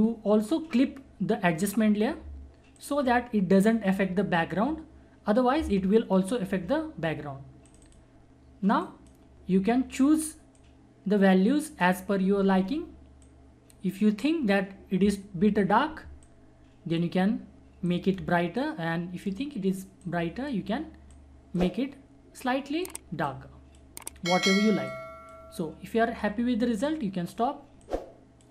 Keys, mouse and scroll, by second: 2.3 click, 7.6 alt+click, 10.6-16.2 alt+drag, 16.2-28.5 alt+drag.